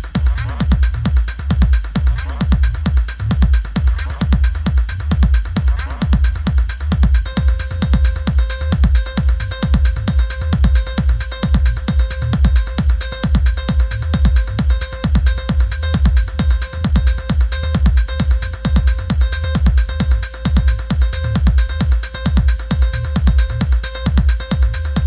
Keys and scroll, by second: 1.7 i, 4.0 Left, 6.6 Left, 7.1 Down, 8.0 Left, 23.3 i.